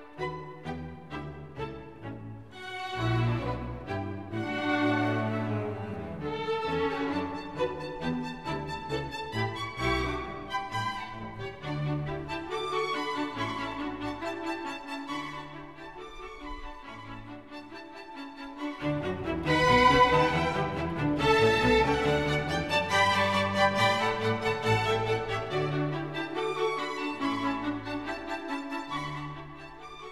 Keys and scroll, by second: 2.7 ctrl+v, 6.1 ctrl+v, 9.2 ctrl+v, 12.4 ctrl+v.